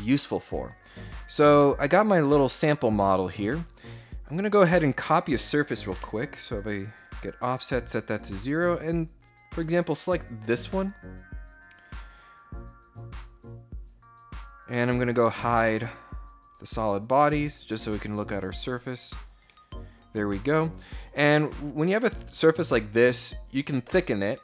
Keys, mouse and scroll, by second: 3.5 click, 4.8 click, 6.6 click, 7.9 click, 9.7 click, 14.3-15.0 scroll up 4, 16.2 right click, 17.0 click, 17.5 click, 18.7 scroll down 2, 19.1-19.7 scroll up 2, 23.1 click.